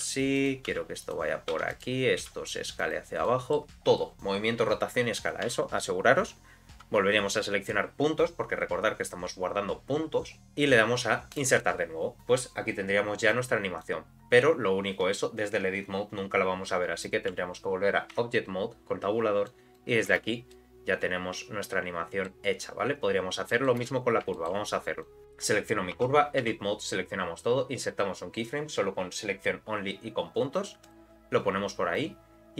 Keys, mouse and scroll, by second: 0.0 s, 0.7 g, 1.5 2, 1.7 click, 2.2 s, 3.2 click, 3.2 middle click, 5.5 a, 11.3 click, 13.8-17.1 drag, 18.2 Tab, 19.5 click, 20.1 space, 20.5-22.3 middle drag, 23.5 middle click, 23.8 space, 24.3 shift+middle click, 25.0 click, 25.9 Tab, 26.4 a, 30.8 click, 32.0 click.